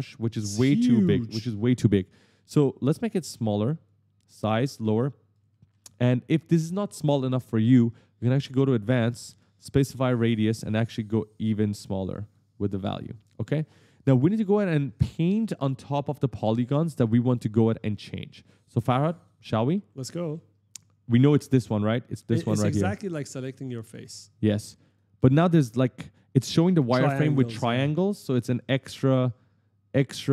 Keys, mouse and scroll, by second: 3.7 click, 5.1 right click, 5.2 right click, 5.4 right click, 6.8 right click, 6.9 right click, 8.6 click, 9.4 click, 11.0 click, 13.3 s, 13.4 right click, 19.1 right click, 19.4-20.6 typing, 19.7 right click, 19.9 right click, 20.1 right click, 21.4 click, 23.0 right click, 23.1 right click, 23.3 right click, 23.4 right click, 23.5 right click, 23.7 right click, 24.7 click, 25.0 right click, 26.2 right click, 26.2-28.5 typing, 26.3 right click, 26.6 right click, 27.2 right click, 27.4 right click, 27.8 right click, 28.0 right click, 28.9 click.